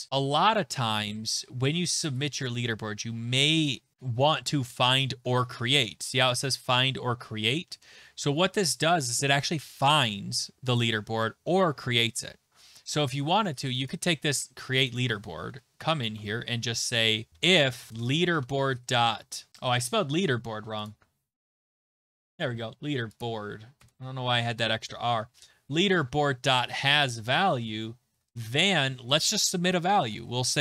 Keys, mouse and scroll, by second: 7.7 click, 9.9 click, 10.8 click, 13.7 click, 13.9 click, 14.9 click, 15.5 Return, 16.2 Tab, 16.7 Return, 17.0-20.0 typing, 20.9 click, 21.6 BackSpace, 23.2 click, 23.8-26.6 BackSpace, 24.3 Right, 24.5 Right, 24.7 Right, 24.8 Right, 24.9 Right, 25.1 Right, 25.2 Right, 26.2 ., 26.5 h, 26.9 Tab, 28.1 typing, 28.3 Return, 30.5-30.6 typing.